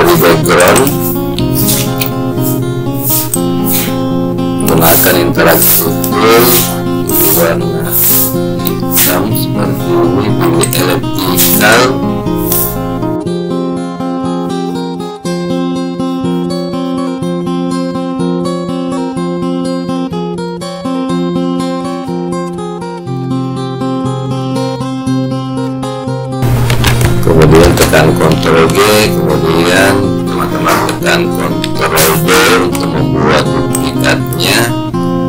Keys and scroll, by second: 28.7 ctrl+g, 31.8 ctrl+d.